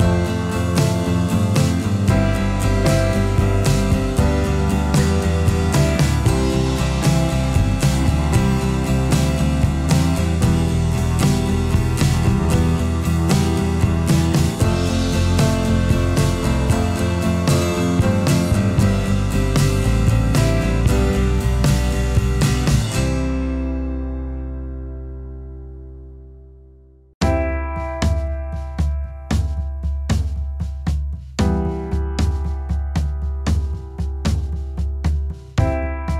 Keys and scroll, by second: 6.1 ctrl+t, 8.4 ctrl+t, 9.6 ctrl+-, 11.9 ctrl+-, 30.7 ctrl+0, 32.4 ctrl+0.